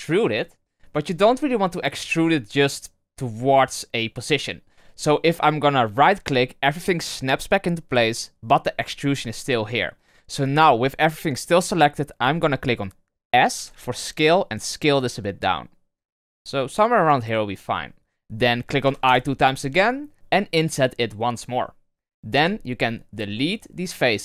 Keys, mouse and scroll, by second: 13.5 s, 18.8 i, 22.3 x.